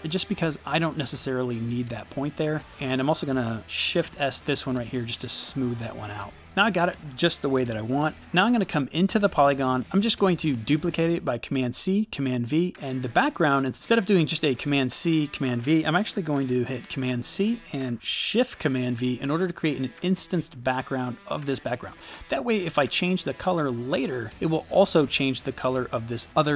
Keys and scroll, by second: 0.0 Delete, 4.2 shift+s, 10.0 super+v, 16.9 super+c, 18.9 shift+super+v.